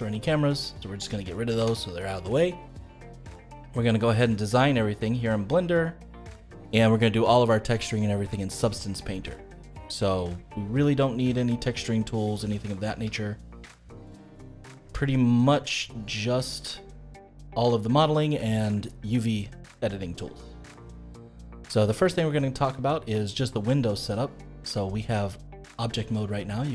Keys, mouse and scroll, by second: 0.5 click, 1.5 Delete, 3.3-6.8 middle drag, 9.2-9.9 scroll up 3, 9.9-10.4 scroll down 3, 10.4-12.5 middle drag, 12.5 space, 12.6-14.8 middle drag, 14.8 space, 16.3 click, 16.8-19.9 middle drag, 22.0-25.2 middle drag.